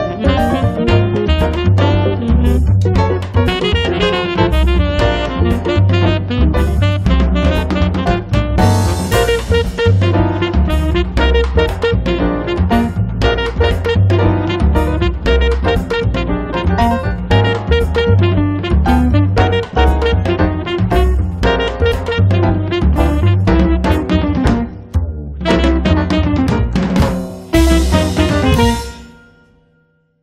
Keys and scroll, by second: 22.9 1, 29.6 2, 29.9 0.